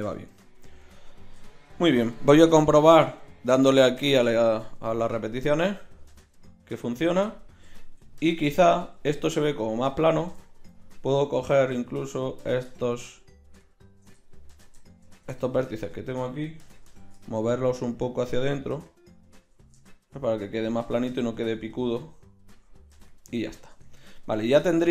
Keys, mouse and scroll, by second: 2.9-7.2 middle drag, 7.9 KP_1, 16.7 g, 23.0 KP_1, 23.7 Tab.